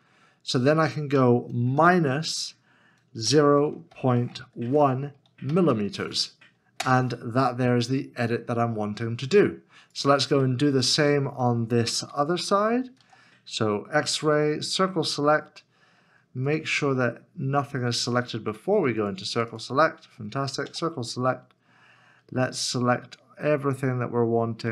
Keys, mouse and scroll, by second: 1.8 -, 3.9 0, 4.7 1, 5.7 m, 6.8 Return, 9.0 Return, 9.9-10.4 scroll down 1, 10.4 shift+middle click, 12.0 KP_7, 13.0 alt+z, 13.9 alt+z, 18.6-19.2 scroll up 1, 19.2 right click, 20.7 c, 22.0 scroll down 1, 22.2-22.6 scroll up 1, 22.6 scroll down 1.